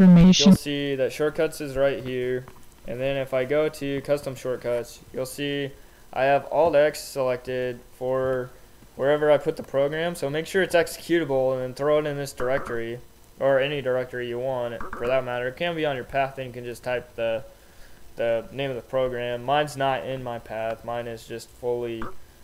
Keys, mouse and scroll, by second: 0.0 Return, 6.9 click, 8.5 click, 8.9 Right, 12.8 Left, 15.4 Right, 18.3 Right.